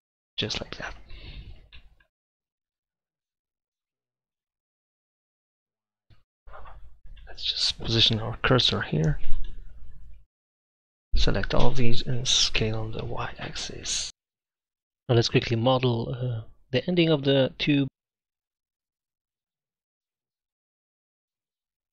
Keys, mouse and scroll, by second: 2.4 g, 3.8 s, 6.1 Tab, 6.1 ctrl+z, 6.7 Tab, 7.1 click, 8.7 shift+s, 10.7 a, 11.0 a, 12.6 s, 14.4 Tab, 16.0-17.1 drag, 16.1 Tab, 17.4 f, 17.9 ctrl+z, 18.5 shift+s, 19.6 e, 21.2 e.